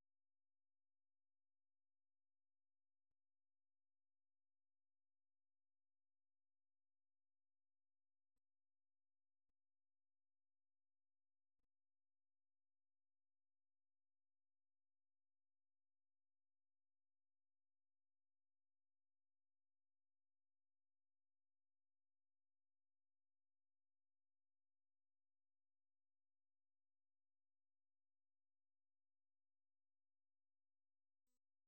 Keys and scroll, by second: 0.8-5.0 typing, 6.2-11.5 typing, 14.0 typing, 15.4-18.9 typing, 20.6-21.5 typing, 23.0-25.5 typing, 26.9-28.3 typing, 29.8 typing.